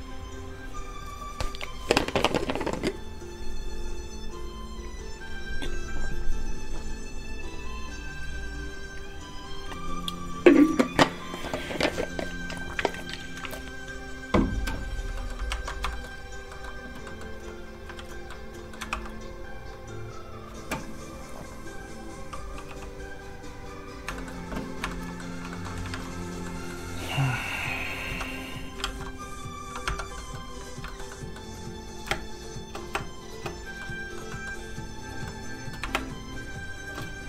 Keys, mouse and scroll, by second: 15.1 middle click, 15.1 click, 15.5 ctrl+Tab, 15.9 shift+middle click, 16.5 middle click, 16.6 middle click, 17.9 alt+shift+z, 18.3 shift+middle click, 18.9 shift+r, 20.3 click, 22.6 shift+g, 23.2 click, 24.1 shift+middle click, 25.0 middle click, 25.1 middle click, 25.4 scroll down 1, 25.5 middle click, 25.9 shift+a, 26.4 middle click, 27.5 scroll down 1, 27.8 scroll up 1, 28.0 Tab, 28.8 alt+shift+z, 29.8 shift+z, 29.9 Tab, 30.1 middle click, 30.8 shift+middle click, 31.1 middle click, 31.2 middle click, 32.1 shift+space, 32.9 space, 33.0 space, 33.8 middle click, 34.8 click, 35.2 middle click, 35.9 shift+space, 37.2 middle click.